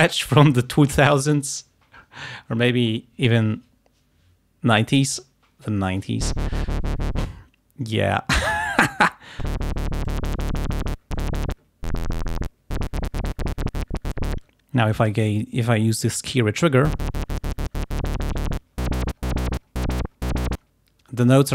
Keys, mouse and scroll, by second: 9.1 click, 10.1 click, 15.1 click.